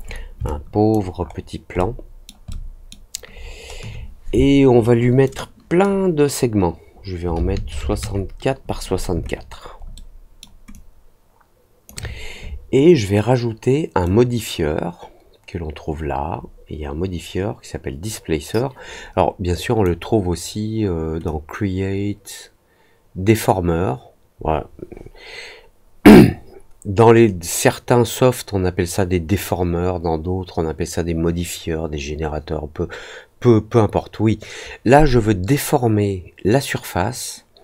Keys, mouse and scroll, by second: 0.0 middle click, 0.4 alt+click, 1.1 alt+middle click, 1.6 alt+scroll up 1, 1.7 alt+middle click, 2.4 alt+middle click, 3.3 alt+scroll up 1, 5.2 click, 9.9 alt+middle click, 10.7-11.8 alt+drag, 14.0-19.8 drag, 21.2-37.6 drag.